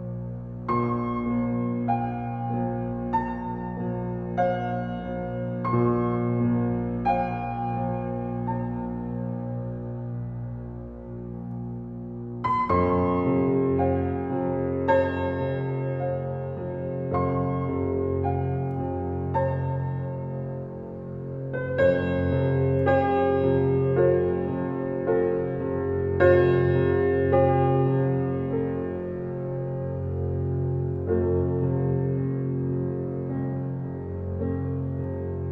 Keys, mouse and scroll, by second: 9.0 alt+right click, 10.1 w, 10.8-12.3 drag, 12.9 alt+click, 13.7 alt+right click, 14.6 click, 14.8-20.5 drag, 21.4 alt+click, 22.0 alt+middle click, 22.3 click, 23.3 right click, 24.3 click, 29.1-30.7 alt+middle drag, 30.7 click, 35.2 alt+click.